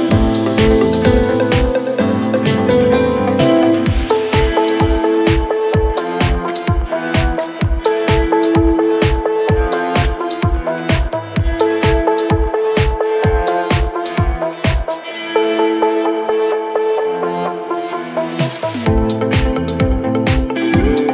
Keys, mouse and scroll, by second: 1.8-3.1 typing, 1.8 click, 3.4 click, 3.5 click, 5.2 click, 7.1 click, 8.4 click, 10.1-11.0 typing, 11.9 click, 12.4 click, 14.4 click, 14.6 click, 15.9 click, 17.5 click, 18.7 click.